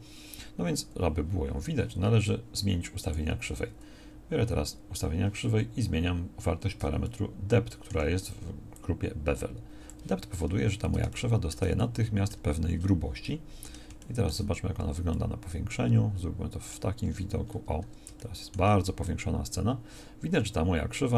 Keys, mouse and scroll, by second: 10.4-13.3 middle drag, 17.6 middle click.